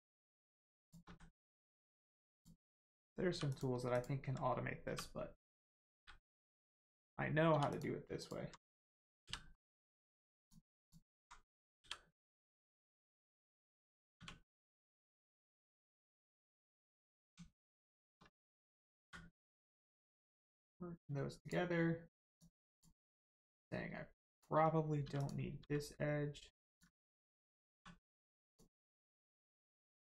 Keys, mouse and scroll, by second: 1.1 x, 2.3 click, 3.3 2, 3.5 click, 3.9 alt+click, 4.8 1, 5.5 click, 7.5 2, 7.7 click, 8.2 alt+click, 9.5 middle click, 10.4 click, 10.8 alt+click, 11.8 f, 12.4 middle click, 12.8 shift+middle click, 13.2 scroll up 1, 13.6 middle click, 14.2 1, 14.4 middle click, 14.8 scroll up 1, 15.4-15.8 scroll down 1, 15.8 middle click, 16.3-16.8 scroll up 1, 17.1 click, 17.5 shift+click, 17.8 shift+click, 19.8 click, 22.3 click, 25.0 2, 25.2 click, 25.6 x, 26.6 click, 27.7 click, 27.7 1, 28.4 click, 28.9 middle click.